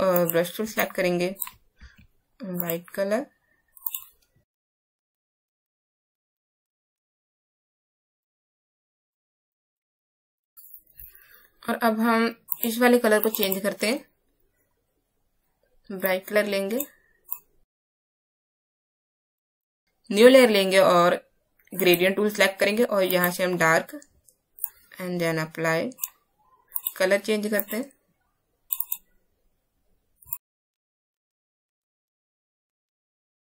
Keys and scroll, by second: 1.7 alt+x, 6.7 Right, 6.8 Right, 7.1 Right, 7.6 Left, 9.5 space.